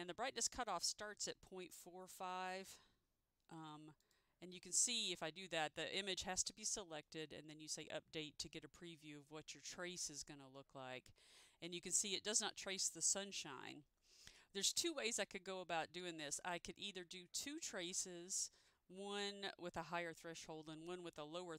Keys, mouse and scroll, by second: 1.7 4, 4.1 click.